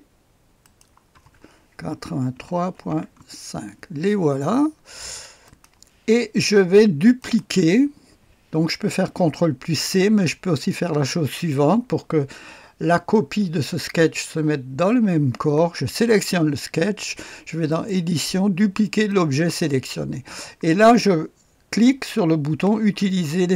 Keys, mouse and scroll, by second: 0.6 click, 0.9-3.3 typing, 5.3-6.0 typing, 5.4 middle click, 5.6 click, 5.9 middle click, 7.2 middle click, 7.4 click, 8.5-9.2 typing, 16.0 click, 17.6 middle click, 17.9 click, 19.0 click.